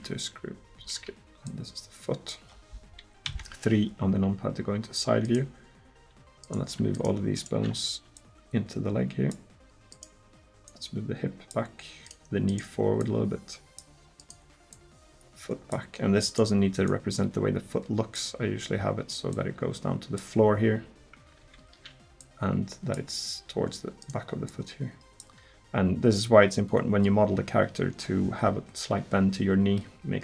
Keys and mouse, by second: 1.5-3.3 drag, 3.3 KP_3, 8.2-9.3 middle drag, 9.3 click, 20.6 click, 21.5 ctrl+z, 22.2 click, 24.5-25.9 right drag, 26.1 click.